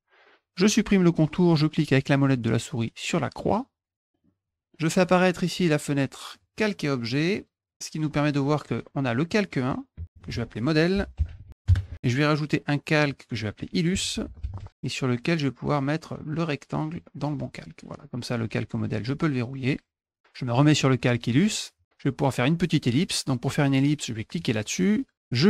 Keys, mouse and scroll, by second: 3.4 middle click, 4.1 middle click, 4.7 middle click, 5.6 click, 6.3 click, 7.7 click, 9.6 click, 10.7-11.8 typing, 13.1 click, 13.7-15.1 typing, 15.7-16.9 drag, 18.4 click, 19.6 click, 20.5 click, 21.3 click, 24.4 click, 25.2-25.4 drag.